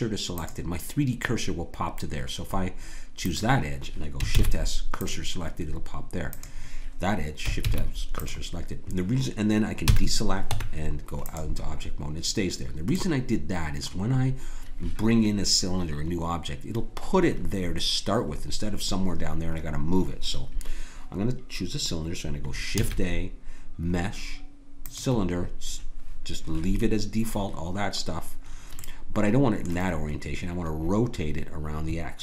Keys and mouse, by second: 3.2-6.3 drag, 4.3 shift+s, 7.6 shift+s, 9.9 a, 10.5 Tab, 22.8 shift+a, 28.8 middle click.